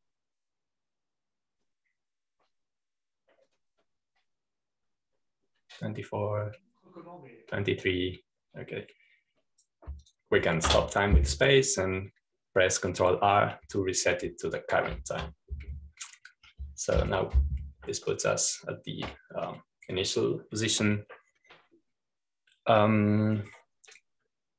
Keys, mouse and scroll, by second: 16.8 ctrl+r, 18.9 Home, 20.0-21.0 drag.